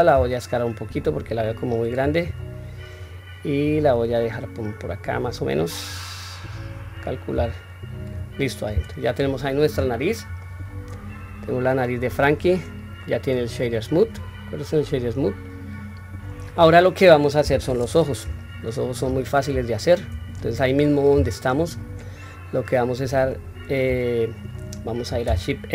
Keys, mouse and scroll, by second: 1.9-2.3 scroll down 2, 2.5 scroll up 1, 3.8 click, 3.8 scroll up 1, 5.6 click, 7.1 s, 8.4 Tab, 8.9 scroll down 1, 9.5-10.1 scroll down 1, 10.1-12.1 middle drag, 10.1-10.7 scroll up 1, 12.8-13.8 right drag, 14.4-16.1 middle drag, 16.4 scroll down 1, 17.1 KP_1, 18.1-18.8 shift+middle drag, 19.0 scroll down 2, 19.5 shift+middle click, 21.3 scroll up 1, 22.1-22.4 scroll up 1, 25.5 shift+a.